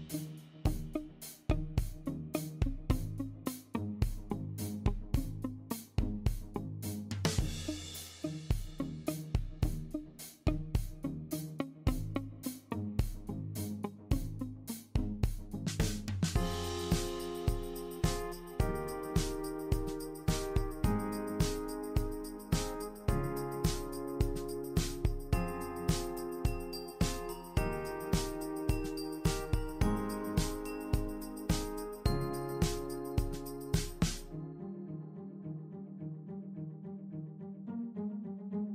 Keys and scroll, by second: 8.3-11.0 typing.